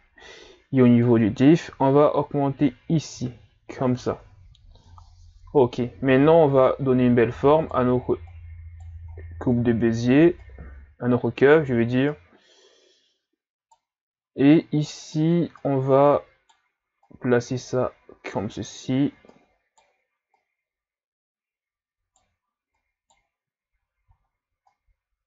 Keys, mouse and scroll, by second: 1.0-4.0 shift+drag, 6.7 right click, 8.3 right click, 9.1-10.2 shift+scroll down 8, 10.4-11.5 right drag, 12.1 right click, 14.5-15.7 right drag, 17.0 right click, 19.3 right click, 20.4 right click, 22.8 right click, 24.1 ctrl+scroll down 2, 24.7 right click.